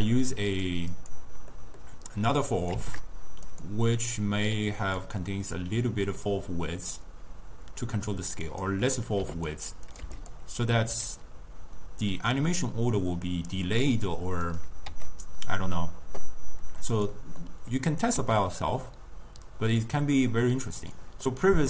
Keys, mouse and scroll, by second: 0.9 click, 1.6 scroll down 1, 1.6-2.7 middle drag, 2.7 click, 3.1 shift+d, 4.2-9.5 drag, 10.0 click, 10.9 s, 17.5 middle click, 18.2 s, 21.3-21.6 middle drag.